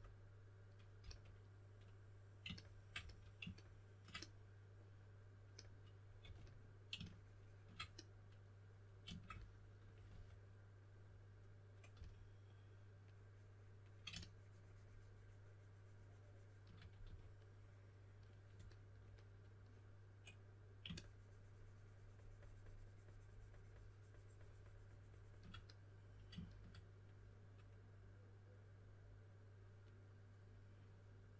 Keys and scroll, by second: 1.0 typing, 2.9 s, 6.2 4, 10.0 3, 11.7-12.4 typing, 17.0 4.